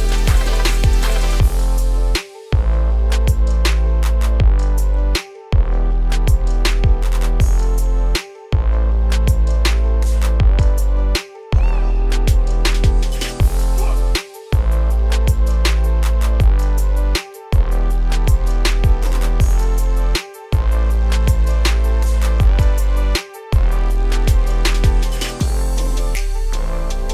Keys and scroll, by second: 8.7 ctrl+space, 18.0 ctrl+space.